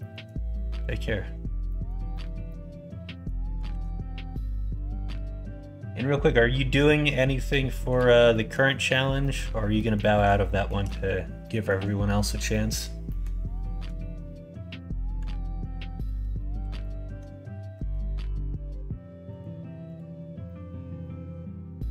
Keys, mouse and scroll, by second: 1.6 middle click, 2.1 middle click, 2.4 middle click, 3.6 ctrl+r, 8.3 middle click, 9.1 middle click, 9.7 middle click, 10.4 shift+middle click, 11.4 middle click, 12.4 middle click, 13.0 middle click, 15.2 ctrl+r, 16.7 click, 17.7 g, 19.8 click, 20.4-21.9 middle drag.